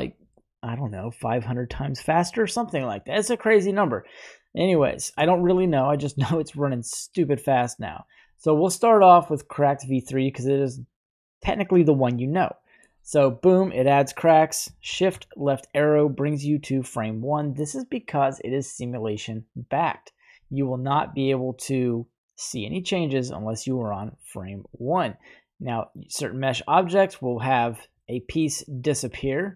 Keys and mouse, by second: 4.4 middle click, 4.9 shift+middle click, 7.8-9.8 right drag, 12.0 click, 12.2 typing, 14.9 shift+Left, 25.3-27.6 drag, 28.0-28.4 middle drag.